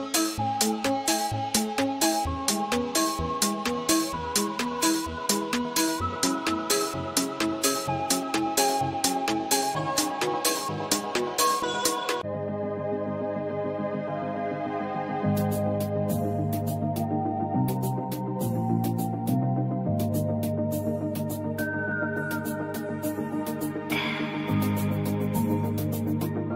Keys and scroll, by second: 4.9 Right, 6.8 Up, 19.2 space, 26.1 space.